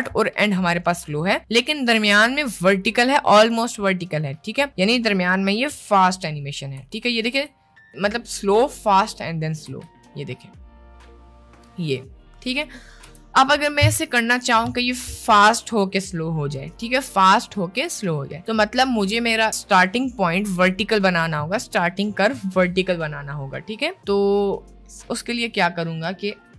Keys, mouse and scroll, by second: 6.8 space, 7.4 space, 8.0 click, 9.7 space, 13.1 space, 24.6 right click, 26.4 t.